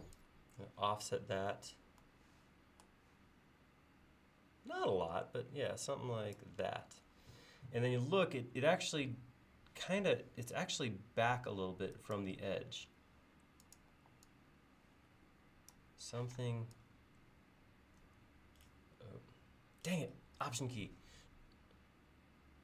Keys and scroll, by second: 6.9 l, 14.0 e, 16.3 p.